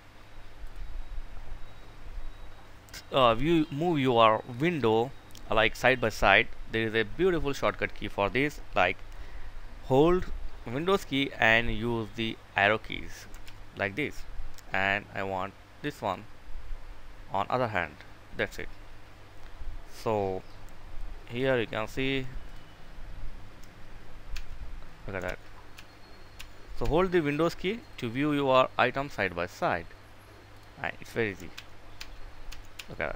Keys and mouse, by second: 12.8 super+Left, 15.3 click, 23.8 super+Right, 24.6 super+Left, 25.1 super+Right, 25.7 super+Left, 26.3 super+Right, 28.8-30.7 drag, 31.4 super+Right, 31.8 super+Down, 32.1 super+Left, 32.6 super+Left, 32.9 super+Right.